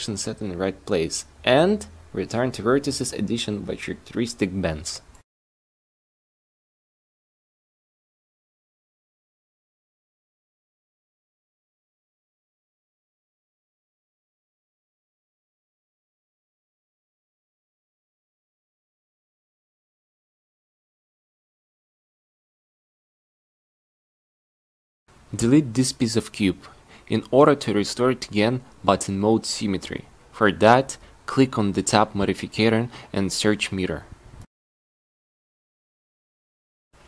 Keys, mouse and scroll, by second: 4.9 shift+scroll, 5.1 a, 5.6 c, 11.3 a, 11.5 c, 12.6 click, 19.8 a, 20.0 c, 20.9-22.8 right drag, 23.1 q, 24.7 q, 25.6 a, 25.9 c, 28.9 x, 31.7 n, 34.0-35.1 drag, 35.3 click.